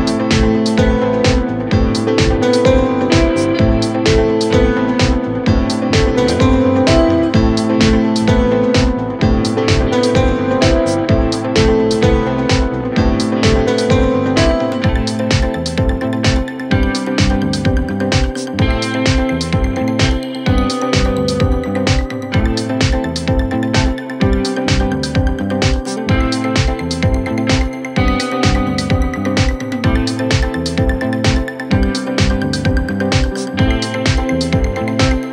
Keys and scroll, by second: 0.2 shift+F2, 0.5 Escape, 13.6 Delete, 16.3 Delete, 17.6 F3, 19.0 ctrl+g, 22.8 shift+Page_Up, 23.5 Escape, 24.6 shift+F2, 24.9 Escape.